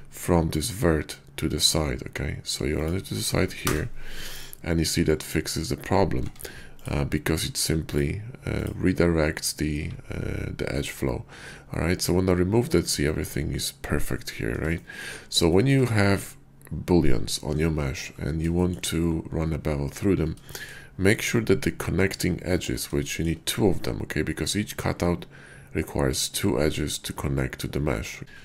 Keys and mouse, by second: 6.2 Tab, 7.8 click, 8.5 click, 9.7 x, 13.1 shift+click, 14.8 shift+click, 15.4 shift+click, 18.6 shift+click, 20.5 shift+click, 23.1 shift+click.